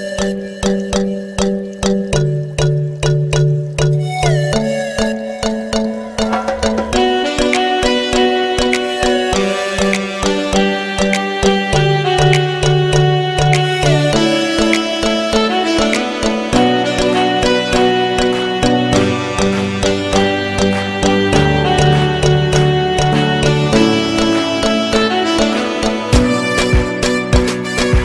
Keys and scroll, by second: 3.1 Delete, 7.0 Caps_Lock, 8.6-12.0 typing, 10.8 Return, 16.2 ctrl+k.